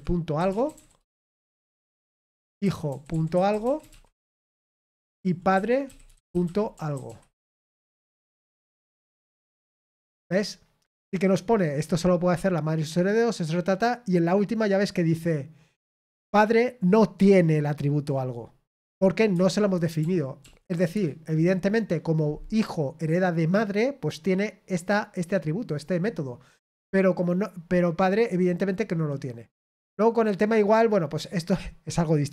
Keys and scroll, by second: 0.3-9.2 typing, 9.4 ctrl+p, 9.6 Return, 19.9 ctrl+p, 20.4 ctrl+p, 20.9 Return.